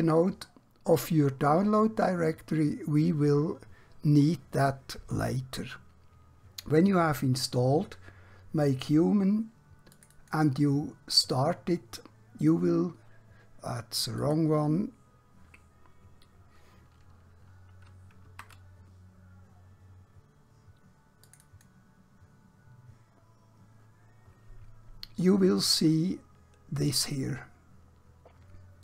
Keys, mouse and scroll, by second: 10.0 click, 17.8 Num_Lock, 17.8 Caps_Lock, 18.2 alt+Tab, 21.3 Num_Lock, 21.3 Caps_Lock, 21.3 click.